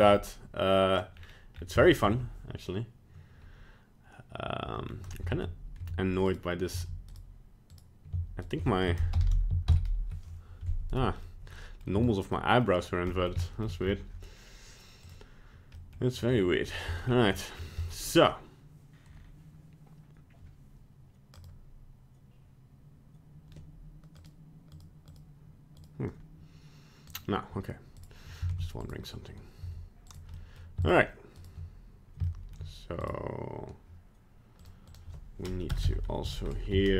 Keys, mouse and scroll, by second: 0.1 middle click, 1.1 scroll down 3, 1.5 scroll up 2, 1.9 shift+middle click, 4.9 scroll down 1, 5.3 ctrl+Tab, 5.8 Tab, 6.3 right click, 6.8 Tab, 7.1 right click, 7.7 right click, 8.4 shift+right click, 9.1 ctrl+l, 9.7 shift+n, 10.9 right click, 11.5 middle click, 11.6 middle click, 12.0 Tab, 12.3 middle click, 12.9 scroll down 1, 13.1 middle click, 13.4 shift+middle click, 13.6 shift+middle click, 13.8-14.3 scroll up 3, 15.2 click, 15.8 middle click, 16.1 right click, 16.3-16.9 scroll down 7, 16.9 middle click, 17.3-17.7 scroll up 7, 17.8 middle click, 21.4 click, 28.0 right click, 28.6 ctrl+Tab, 28.9 right click, 29.7 Tab, 30.1 right click, 30.4 middle click, 30.8 shift+right click, 31.4 right click, 32.2 shift+middle click, 33.0 right click, 34.6 click, 35.8 BackSpace.